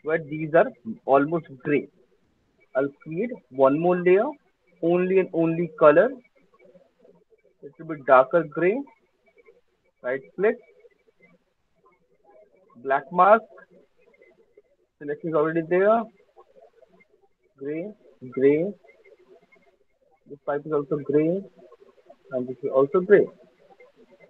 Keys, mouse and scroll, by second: 3.6 click, 5.2 click, 5.7 click, 5.8 click, 7.3 click, 8.5 click, 9.7-14.8 drag, 13.1 right click, 15.8 click, 15.8 alt+right click, 16.2 alt+middle click, 16.5 alt+click, 17.1 click, 17.9 click, 18.0 alt+click, 19.7 alt+click, 20.2 alt+middle click, 20.6 click, 22.2 alt+click, 22.8 click, 23.9 alt+middle click, 24.1 alt+click.